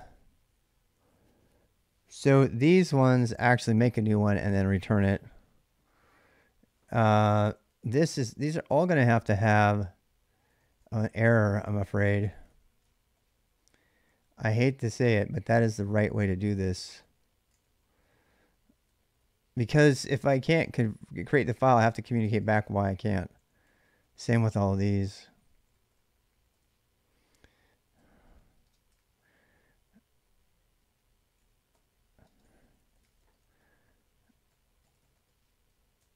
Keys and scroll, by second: 2.0 k, 2.6 k, 2.8 k, 7.0 ctrl+[, 7.1-29.2 typing, 22.1 ctrl+[, 22.4 Return, 30.9-36.1 typing, 35.9 ctrl+[.